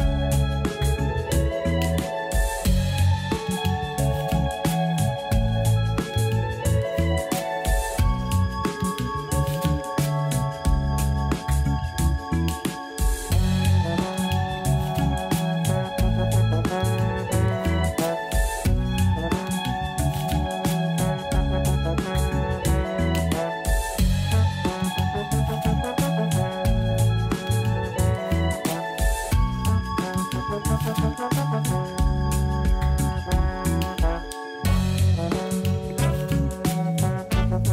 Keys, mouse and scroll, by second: 0.9 a, 1.0 a, 1.2 click, 1.9 click, 2.1 click, 2.4 s, 5.4 a, 5.6 a, 5.8 click, 6.0 click, 6.4 s, 9.0 a, 9.1 a, 10.0 scroll up 1, 10.8-11.2 scroll up 3, 11.2 shift+middle click, 11.7-12.1 scroll down 1, 12.1 Tab, 13.1 scroll up 2, 13.6-14.2 shift+middle drag, 14.6 Tab, 15.7 ctrl+r, 17.0 ctrl+z, 17.8 click, 18.5 click, 18.6 click, 19.1 shift+click, 19.2 shift+click, 20.1 s, 23.3 s, 26.8-27.3 scroll down 5, 27.3 a, 27.5 a, 27.9-29.2 scroll up 1, 30.0 3, 30.4 click, 31.3 shift+click, 32.0 shift+click, 32.5 x, 36.0-36.9 scroll down 2, 36.9 a, 37.1 a, 37.5-37.7 middle drag.